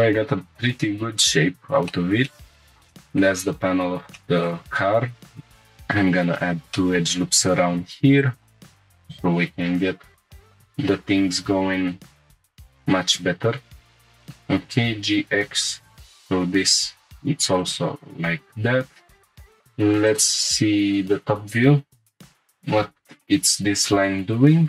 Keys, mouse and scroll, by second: 0.4-1.4 scroll down 2, 1.4 scroll up 1, 1.9-2.2 shift+middle drag, 2.3 middle click, 2.9 shift+middle click, 4.1 middle click, 5.4 ctrl+r, 5.7 right click, 6.2-6.7 scroll up 2, 6.7 shift+middle click, 7.5 1, 8.2 click, 8.9 y, 9.5 x, 10.4 click, 10.4 x, 10.4 g, 12.1 click, 12.4 shift+middle click, 13.1 click, 13.6 shift+click, 14.0 g, 14.0 x, 14.5 g, 14.9 x, 16.6 shift+click, 17.1 click, 17.6 shift+click, 18.3 g, 18.5 x, 19.0 shift+click, 20.1 click, 20.9 scroll up 2, 22.2 click.